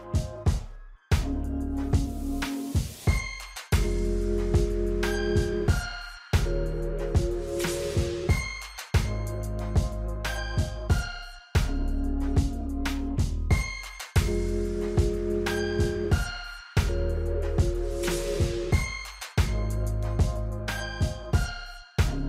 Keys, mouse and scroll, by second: 1.0-5.9 drag, 10.3 shift+click, 15.2 right click, 16.3 click, 17.7 right click, 18.6 click, 19.9 click, 22.1 F9.